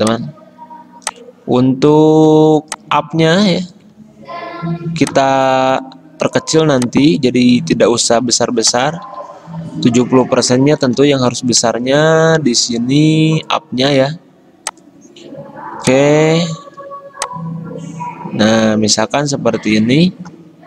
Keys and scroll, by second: 8.4 t, 9.1 ctrl+a, 10.7-11.6 typing, 11.9 ctrl+a.